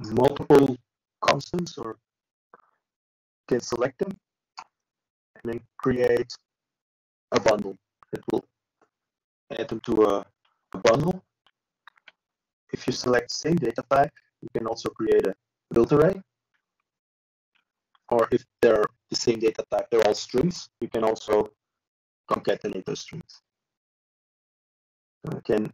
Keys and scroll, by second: 8.3 ctrl+z, 8.6 ctrl+z, 8.9 ctrl+z.